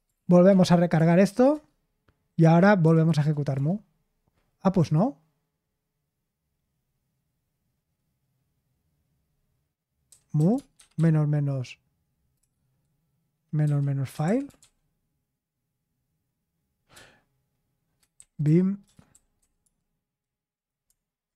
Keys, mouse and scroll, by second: 0.0-3.5 typing, 9.8-12.4 typing, 13.8-15.0 typing, 16.9-19.6 typing.